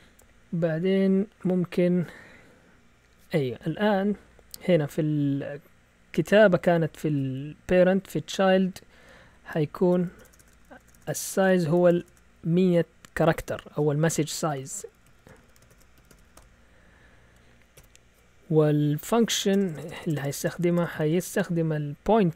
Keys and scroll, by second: 0.2 Down, 0.4 Down, 0.5 Down, 0.7 Down, 1.1-1.9 typing, 4.4 Up, 4.8-5.8 typing, 8.9-10.6 typing, 9.4 Right, 14.1-16.8 typing, 17.7 Down, 19.4-20.5 typing.